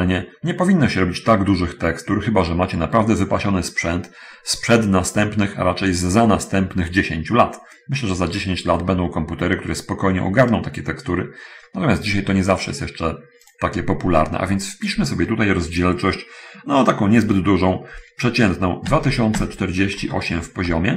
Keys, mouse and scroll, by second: 13.8 click, 19.1-20.9 typing.